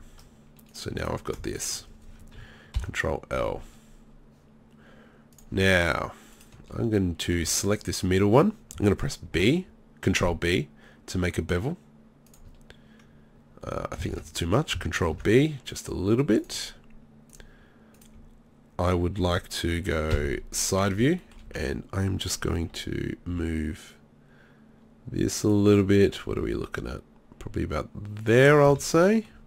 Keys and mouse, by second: 2.8 ctrl+l, 7.0 middle click, 7.3-9.3 drag, 9.3 ctrl+b, 12.4-14.1 drag, 14.1 ctrl+z, 15.2 ctrl+b, 17.3 click, 20.1 KP_3, 21.5 z, 23.3 g, 25.5-28.2 drag, 26.4 g, 28.7 z.